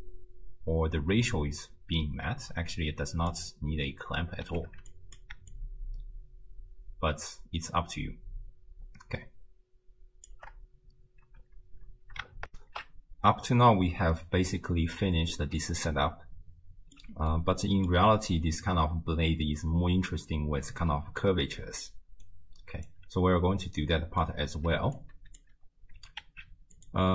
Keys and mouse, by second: 3.3 click, 4.7 ctrl+x, 4.9 click, 5.5-10.3 shift+drag, 12.5 ctrl+alt+shift+w, 12.5 ctrl+alt+shift+q, 16.1 ctrl+middle click, 17.3 middle click, 20.9-22.3 d, 21.3 click, 22.3 click, 22.9 d, 23.0 d, 23.0 d, 23.8 middle click, 25.0-25.5 drag, 26.0 g.